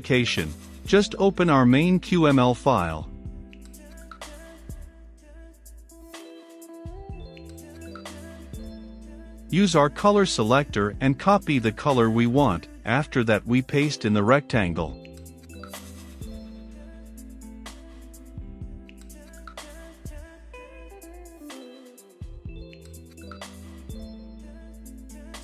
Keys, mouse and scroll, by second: 5.0 middle click, 5.5-9.0 drag, 9.0 right click, 9.7-12.6 drag, 12.6-13.8 right drag, 13.8-16.1 drag, 16.9 click, 18.2-21.5 drag.